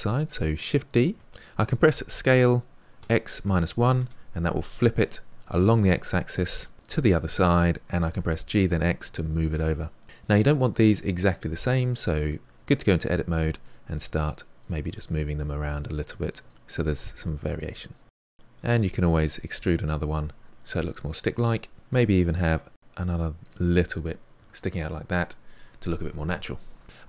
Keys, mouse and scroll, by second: 1.0 shift+d, 5.3-6.7 middle drag, 7.9 g, 10.0-12.2 middle drag, 12.2 Tab, 13.0 click, 13.9 g, 14.7 click, 14.9 g, 15.4 click, 15.6 g, 16.0 click, 16.2 g, 17.5 click, 17.7 g, 18.5 e, 19.2 Tab, 19.8-20.4 middle drag, 20.4-20.8 scroll down 4, 20.8 middle click, 21.3-21.8 scroll up 4, 22.0 Tab, 22.4 click, 23.2 e, 24.9 Tab, 25.5-26.8 middle drag.